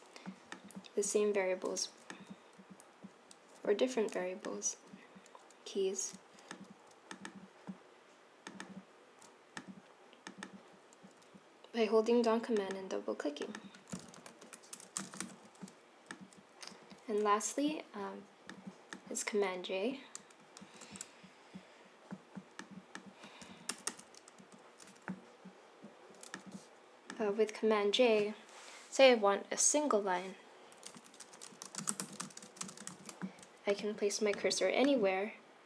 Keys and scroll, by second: 14.3 Left, 14.5 Right, 14.9-15.7 typing, 20.8 super+c, 23.6 Return, 23.8 Return, 24.3 super+v, 30.9 Up, 31.2 Return, 31.2-34.8 typing.